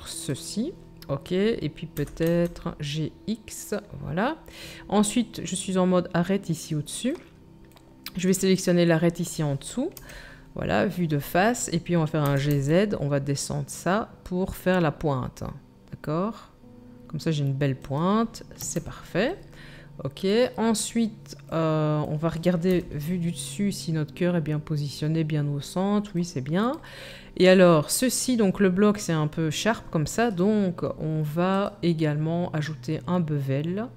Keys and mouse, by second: 1.9 g, 8.1 middle click, 8.1 right click, 9.9 KP_1, 12.2 g, 18.6 Tab, 22.7 KP_7, 31.6-33.9 middle drag.